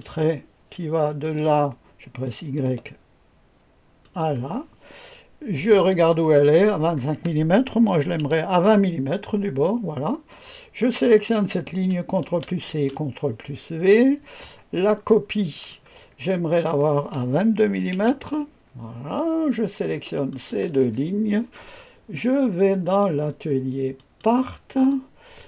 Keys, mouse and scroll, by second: 1.2 click, 2.6 y, 4.0 click, 5.7 click, 6.6 click, 7.8 KP_2, 8.1 KP_0, 11.0 click, 12.2 ctrl+c, 12.6 ctrl+v, 14.6-15.5 scroll down 1, 15.5 click, 16.5 click, 17.7 KP_2, 17.9 KP_2, 20.2 ctrl+click, 22.8 click, 23.9 click, 24.8-25.4 drag.